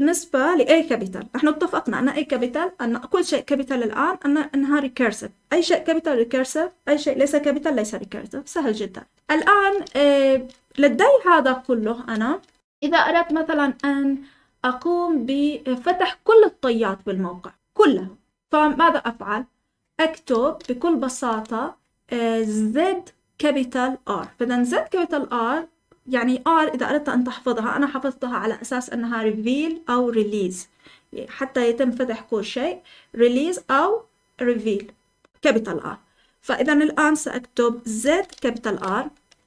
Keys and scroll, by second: 10.3 Escape, 11.3-13.5 typing, 15.8 j, 16.3 j, 18.3-19.0 typing, 20.6 typing, 38.0-38.6 typing.